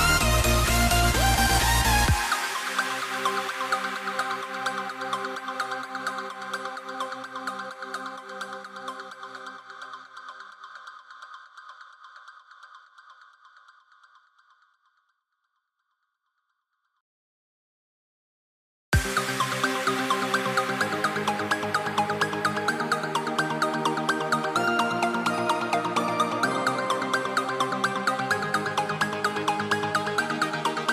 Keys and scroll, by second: 2.5 a, 9.7 a, 10.3 i, 11.6 v, 13.8 super+z, 22.7 a, 23.8 a, 25.9 v.